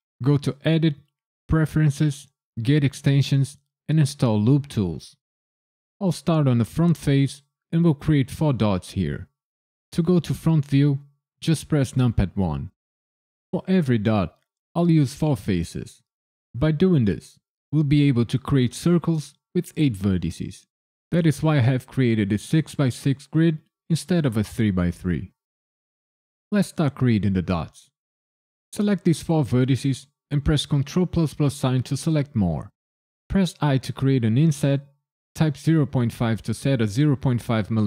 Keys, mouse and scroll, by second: 11.9 KP_1, 12.9 a, 14.0 KP_Decimal, 25.4 click, 26.8 shift+click, 27.9 shift+click, 29.2 shift+click, 30.9 ctrl+KP_Add, 33.6 i, 35.6 KP_Decimal, 36.2 KP_5.